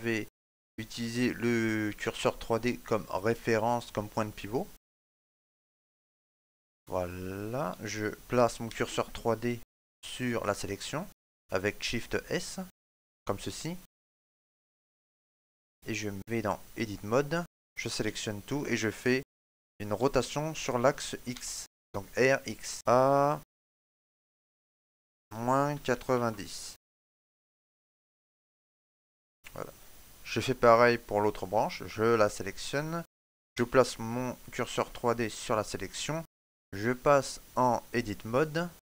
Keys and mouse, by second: 4.7 right click, 6.8 middle click, 8.5 shift+s, 13.6 middle click, 14.3 right click, 14.7 click, 17.9 a, 19.8 r, 27.4 click, 27.4 middle click, 29.2 Tab, 31.7 right click, 33.4 shift+s, 36.8 click.